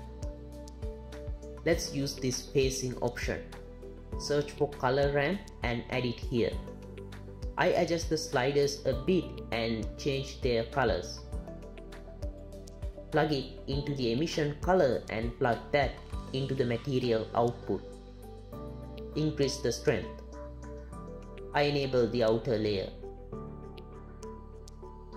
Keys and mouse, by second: 0.0 click, 1.6 click, 3.9 q, 4.0 shift+a, 7.0 click, 8.8 click, 9.7-10.4 drag, 10.7 click, 11.7 click, 14.1-14.4 drag, 15.8-17.1 drag, 19.2-21.6 drag, 22.2-23.6 drag.